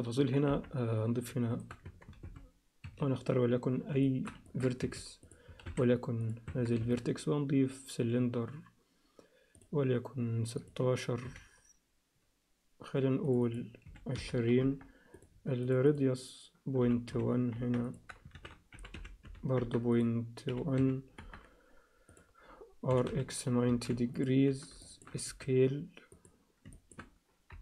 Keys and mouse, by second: 0.5 KP_1, 1.5 shift+right click, 1.9 Tab, 2.2 shift+a, 4.0 alt+shift+middle click, 4.4 ctrl+alt+click, 4.9 1, 5.3 click, 5.6 shift+s, 6.5 Tab, 6.8 shift+a, 10.6-14.8 drag, 15.1-19.7 drag, 19.9-21.5 drag, 22.1 click, 22.9 r, 24.8 alt+shift+middle click, 25.2 s, 26.7 alt+shift+middle click, 27.5 KP_7.